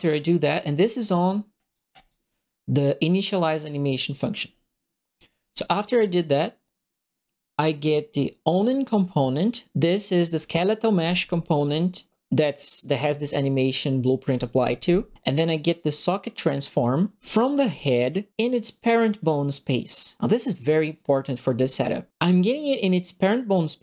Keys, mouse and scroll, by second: 0.2 right click, 1.0 right click, 1.5 right click, 1.9 right click, 4.4 middle click, 4.8 right click, 5.0 click, 5.1 right click, 5.2 click, 5.3 right click, 5.9 middle click, 5.9 scroll down 1, 6.6 right click, 8.5 click, 16.6 click.